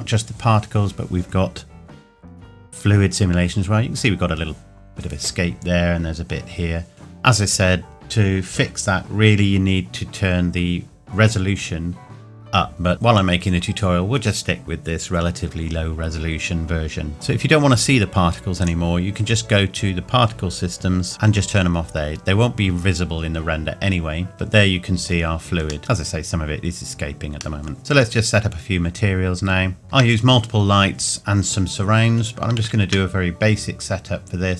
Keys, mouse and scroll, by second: 16.7 scroll up 1, 17.1 click, 18.6 click, 21.1 click, 24.3 middle click, 25.8-27.6 scroll up 1, 27.6 middle click, 29.3-29.8 scroll down 1, 29.8 ctrl+s.